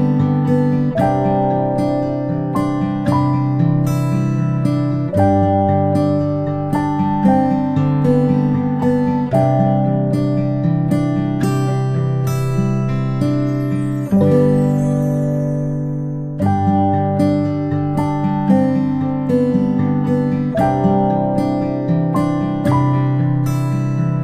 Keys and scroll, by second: 6.3 ctrl+space, 6.5 ctrl+space, 7.1 p, 11.5 space, 11.7 space, 13.8-14.2 ctrl+space, 23.8 ctrl+shift+[, 24.1 ctrl+].